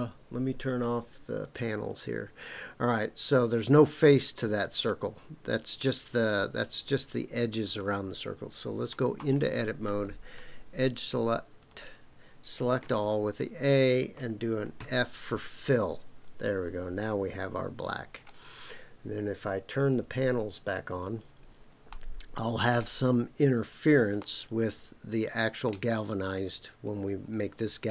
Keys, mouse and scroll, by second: 1.4 click, 9.2 Tab, 11.6 click, 12.8 a, 14.8 f, 20.9 click, 21.9 middle click, 24.2-25.7 middle drag.